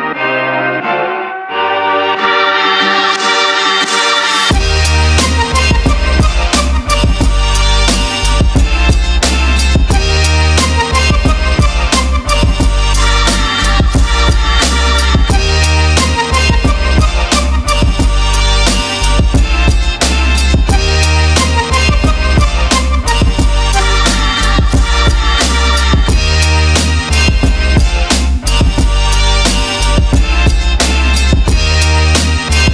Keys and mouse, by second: 0.5 click, 1.1-2.3 drag, 2.7 click, 2.8-3.4 drag, 8.3-11.3 drag, 11.6-14.0 middle drag, 15.3 click, 16.5 click, 17.3-18.5 drag, 19.7 click, 20.8 ctrl+middle click, 24.1-25.5 middle drag, 26.8-28.2 middle drag, 31.6 click.